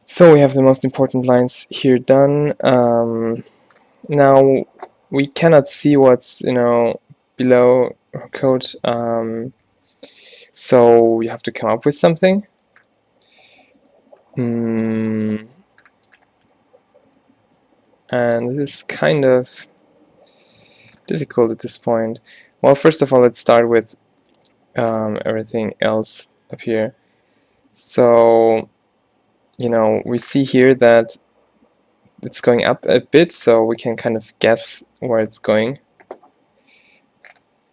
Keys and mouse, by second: 24.9 shift+d.